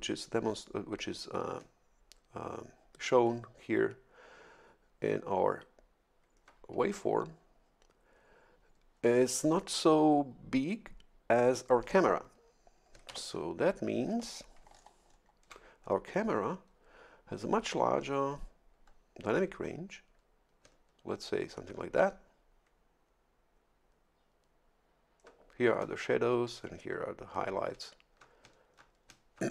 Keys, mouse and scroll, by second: 13.1 shift+F11, 14.7-15.3 ctrl+scroll down 4.